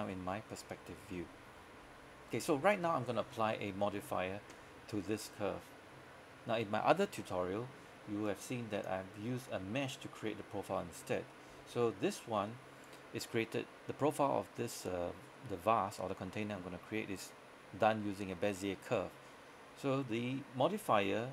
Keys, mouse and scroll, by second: 0.6-2.0 scroll up 1, 8.3 click.